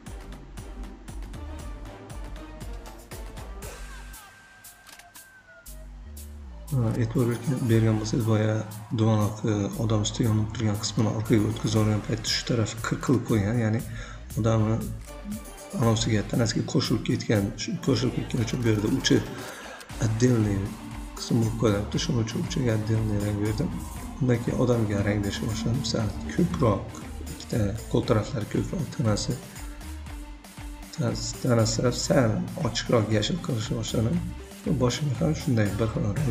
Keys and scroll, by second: 0.0 ctrl+a, 0.1 5, 0.3 Return, 2.3 v, 5.0 v, 12.1 v, 29.9-31.5 typing, 31.4 ctrl+a, 31.6 Return.